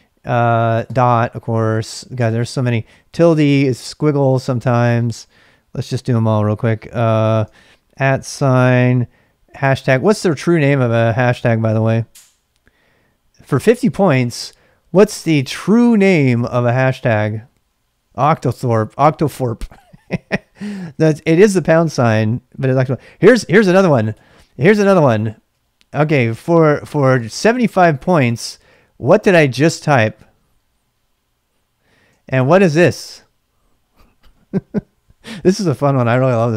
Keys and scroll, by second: 0.8 typing, 3.2 typing, 7.9 typing, 9.6 typing, 24.7-27.9 typing, 26.1 ctrl+[, 29.2 space, 32.3-33.5 typing.